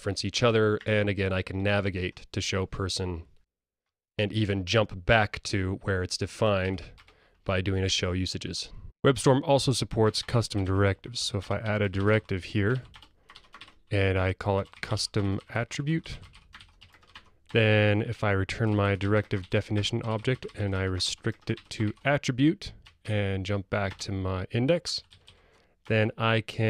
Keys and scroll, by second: 3.4 alt+super+F7, 7.3 super+e, 11.5 Return, 17.4 Tab, 23.1 super+e.